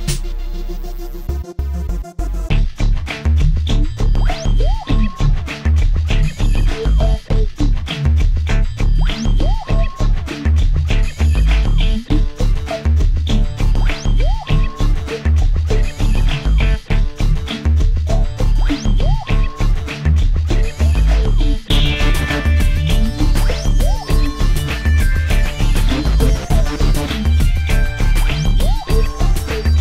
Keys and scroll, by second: 0.9 shift+e, 3.4 shift+s, 3.5 e, 5.5-7.5 typing, 8.7-10.7 typing, 11.9 space, 12.5 Caps_Lock, 13.4 space, 13.9 Caps_Lock, 17.5 Down, 19.5-22.3 typing, 27.6 space, 28.1 space, 28.5 space.